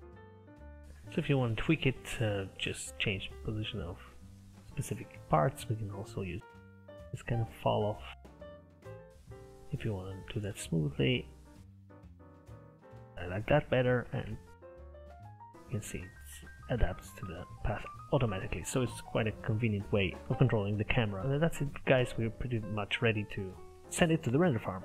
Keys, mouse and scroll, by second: 0.8-2.2 middle drag, 2.2 click, 3.3-5.2 drag, 6.0 click, 6.6 click, 7.2 ctrl+z, 8.4-10.9 drag, 11.6 click, 11.9 click, 12.6 scroll down 3, 12.7 Tab, 12.8 middle click, 13.0 scroll up 2, 13.0 middle click, 13.5 KP_0, 14.1 space, 15.4-17.1 scroll up 3, 17.4 Escape, 17.9 scroll down 2, 18.4 middle click, 18.9-19.6 scroll down 5, 19.6-21.2 middle drag, 21.2-21.6 scroll up 4, 21.9-24.1 shift+middle drag.